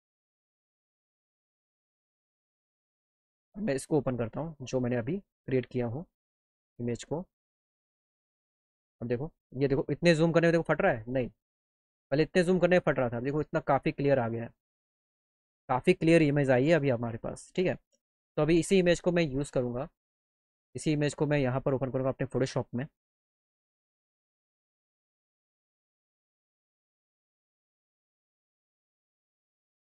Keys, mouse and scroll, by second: 3.0 click, 5.7 click, 6.4 click, 6.9 click, 7.9 click, 8.0 click, 10.9 click, 11.2 click, 19.4 click, 23.2 click, 25.0 click, 26.1 click, 28.2 click, 28.8 click.